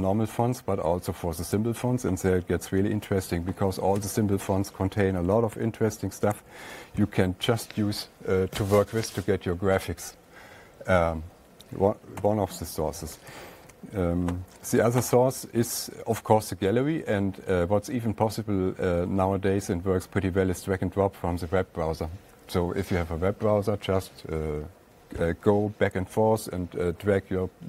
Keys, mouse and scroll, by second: 2.0 click, 2.9-4.0 drag, 4.4 Escape, 6.0-6.7 typing, 12.6 *, 13.7 alt+Tab.